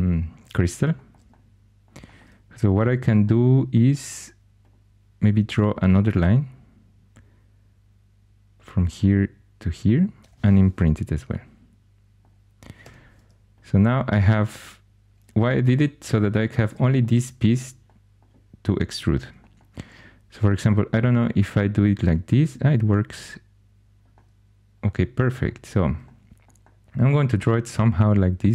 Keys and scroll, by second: 5.9 shift+a, 10.2 shift+i, 12.7 3.